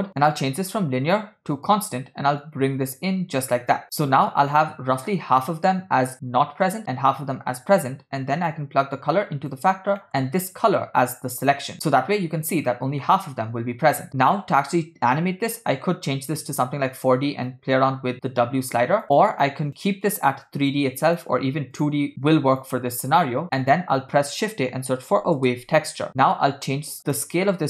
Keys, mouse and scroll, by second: 0.2-1.8 drag, 2.4-4.1 drag, 4.6 scroll down 1, 8.5-9.6 drag, 10.1 middle click, 10.5-11.7 drag, 13.1-13.5 middle drag, 14.1 click, 14.5 middle click, 14.8 scroll down 1, 15.6 click, 17.5-19.0 shift+drag, 19.1 click, 20.4 click, 21.1 click, 22.3 click, 23.5 shift+a, 27.0 click.